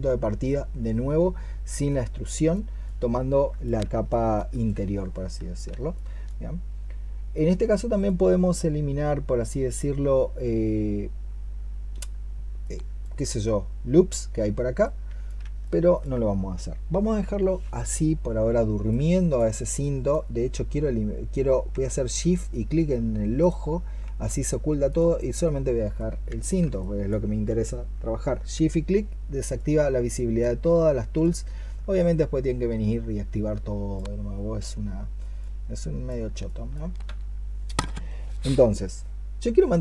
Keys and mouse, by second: 5.8 alt+click, 15.5 alt+click, 19.6 alt+click, 23.2 shift+click, 36.3 alt+click.